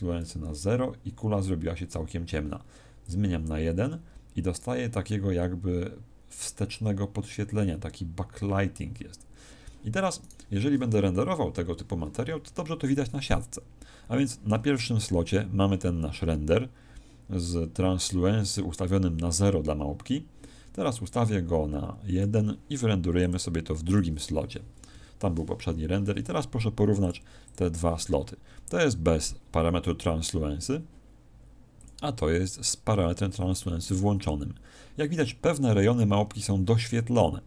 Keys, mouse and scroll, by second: 3.0 click, 10.2 right click.